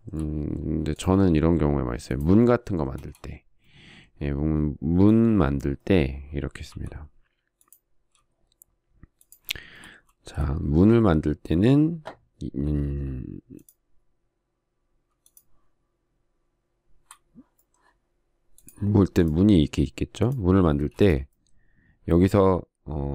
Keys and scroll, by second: 3.7 space, 7.4 m, 10.8 space, 21.5 space.